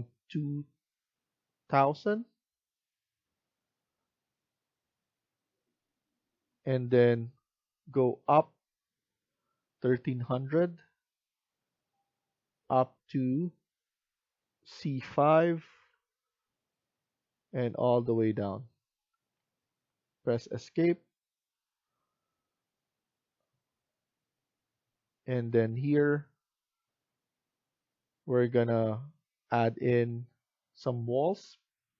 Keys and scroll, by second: 20.6 Escape.